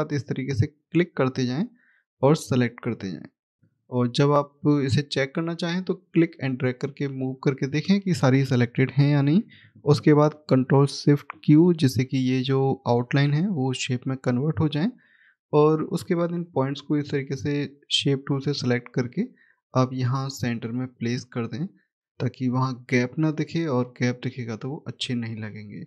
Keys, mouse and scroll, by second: 1.1 shift+click, 2.0 shift+click, 3.7-4.9 scroll down 1, 4.9 middle click, 6.2 click, 7.6 click, 12.7 click, 14.1-15.1 scroll up 1, 15.7 click, 22.7-23.3 scroll down 1, 24.5 click, 25.2-25.8 scroll up 1.